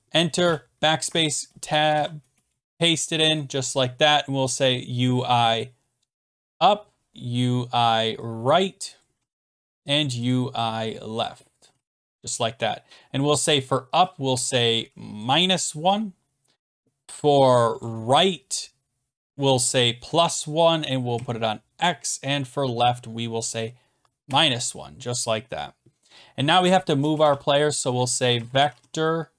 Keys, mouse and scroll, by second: 0.4 BackSpace, 1.1 ctrl+v, 1.5 Return, 1.7 BackSpace, 1.9 ctrl+v, 2.2 Return, 2.5 BackSpace, 2.7 ctrl+v, 5.2 click, 6.2-7.0 typing, 8.9-9.8 typing, 9.0 click, 10.3 click, 11.2 click, 11.7 Left, 15.2 click, 15.8 -, 17.8 click, 21.1 x, 23.4 click, 24.2 -, 25.3-26.2 scroll down 2, 26.6 click, 27.1 Return, 27.2-29.3 typing, 28.2 middle click.